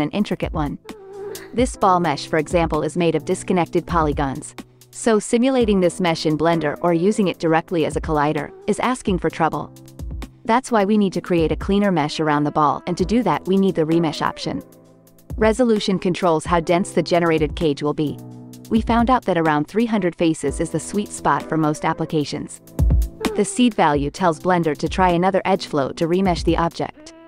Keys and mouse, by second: 2.0 g, 4.1 click, 4.4 g, 6.2 click, 6.8 click, 7.0 g, 8.8 click, 9.0 g, 10.0 Tab, 15.4 click, 16.7-18.6 drag, 19.4 x, 20.3-23.5 drag, 23.7 x, 24.5-27.2 drag, 25.7 KP_0.